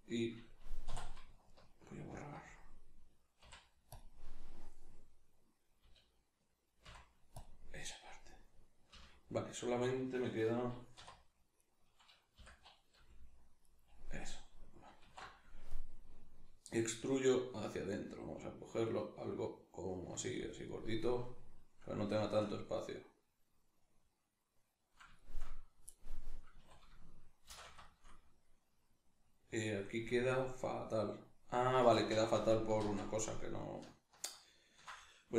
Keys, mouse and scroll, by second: 0.9 3, 1.5 alt+right click, 3.4 x, 4.7 right click, 5.8 l, 8.3 right click, 8.9 l, 10.9 3, 11.5 right click, 12.3 l, 13.7 right click, 15.0 alt+e, 20.5 click, 20.6-32.0 middle drag, 26.6 a, 27.5 shift+n, 32.0 ctrl+z.